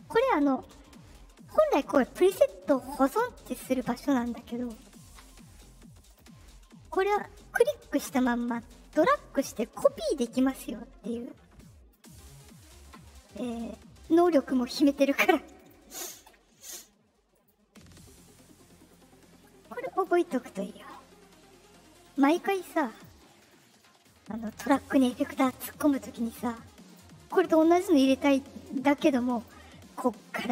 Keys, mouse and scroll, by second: 3.0 click, 4.6 click, 6.0 click, 8.0-11.9 drag, 14.0 click, 14.8 click, 15.5 click, 17.3 click, 18.8-20.0 drag, 22.0 drag, 22.9 click, 24.3 click, 26.8 click, 29.3 click.